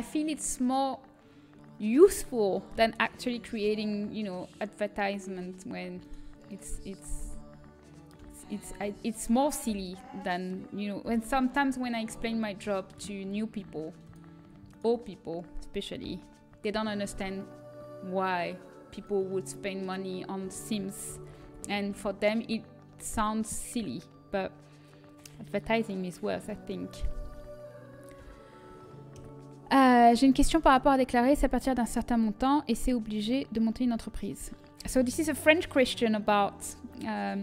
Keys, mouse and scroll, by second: 0.1 z, 3.6 g, 5.9-8.1 right drag, 7.1 a, 8.1 l, 8.7 a, 9.6 l, 10.9 h, 13.9-16.8 drag, 14.6-16.8 right drag, 16.8 g, 21.8 alt+h, 21.8 a, 21.8 z, 29.1 l, 29.1 KP_1.